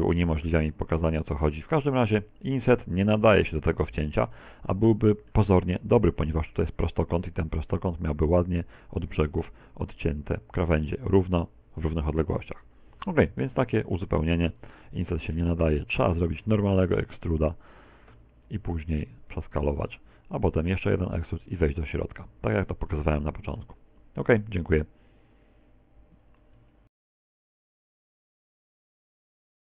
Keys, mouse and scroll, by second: 2.0 Tab, 2.8 middle click, 5.4 right click, 7.4 middle click, 15.9 middle click, 16.8 Tab, 17.7 ctrl+z, 17.8 ctrl+z, 18.0 ctrl+z, 18.3 ctrl+z, 18.6 ctrl+z, 20.2 click, 21.1 e, 21.5 click, 22.0 s, 22.9 click, 23.7 e, 25.1 click, 25.8 middle click.